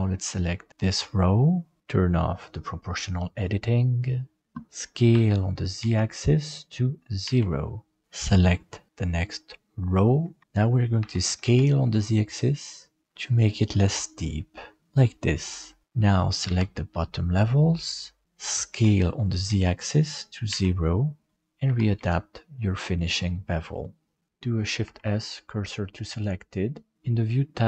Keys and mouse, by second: 5.1 s, 8.0 alt+a, 8.0 c, 11.0 s, 15.8 alt+a, 16.4 b, 18.7 s, 21.6 g, 24.3 shift+b, 24.8 shift+s.